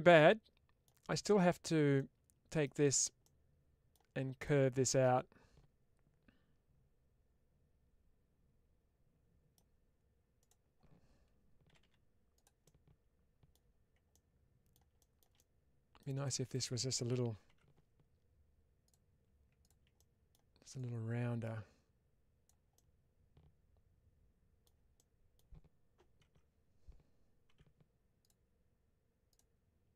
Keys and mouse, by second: 1.8 middle click, 3.1 middle click, 4.3-9.4 middle drag, 12.2 click, 12.5 middle click, 14.0 middle click, 15.8 middle click, 17.4 3, 18.7 click, 19.8 middle click, 20.7-22.3 drag, 22.6-24.5 middle drag, 24.8 middle click, 27.4 2, 28.1 click.